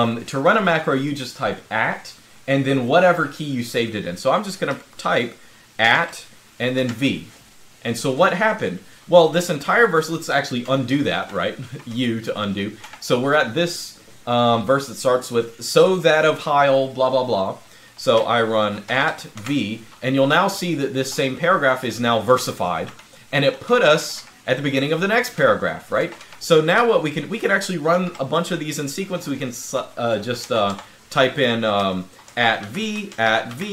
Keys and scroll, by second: 5.6-6.5 typing, 10.4-13.1 typing, 18.6-26.5 typing, 27.7 typing, 30.3 Escape, 30.5 Escape, 31.8-33.7 typing.